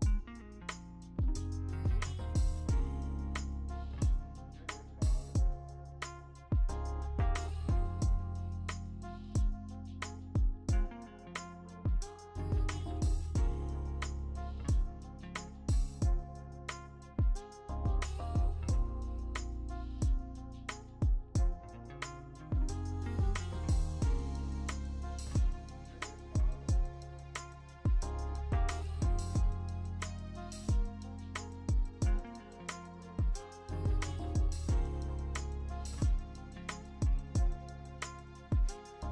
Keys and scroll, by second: 2.6 3, 5.6 x, 7.5-8.8 typing, 10.3 ctrl+alt+g, 16.0 ctrl+z, 18.6 v, 26.8 ctrl+t, 28.2 v, 30.1 alt+Tab, 30.6 alt+Tab, 31.7 ctrl+z, 33.7 alt+Tab.